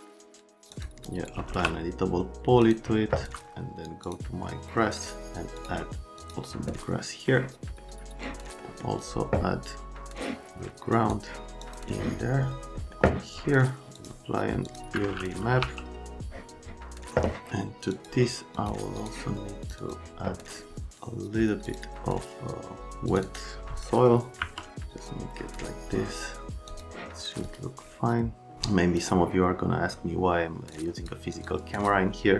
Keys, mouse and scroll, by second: 1.1-2.0 typing, 15.6 t, 17.9 click, 18.5 click, 18.9 click, 19.6 click, 19.7 click, 21.7 click, 23.1 click, 23.3 click, 24.4 KP_Decimal, 26.7 click, 27.4 click, 30.7 click, 31.3 click, 31.7 click.